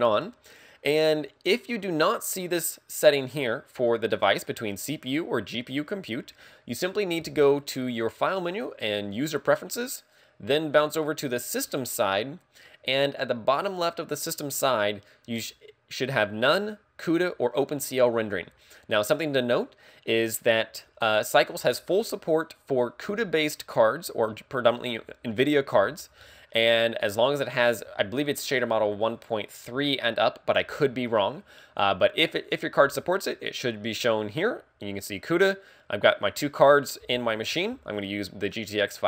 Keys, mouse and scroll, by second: 0.2 middle click, 3.8 click, 8.1 click.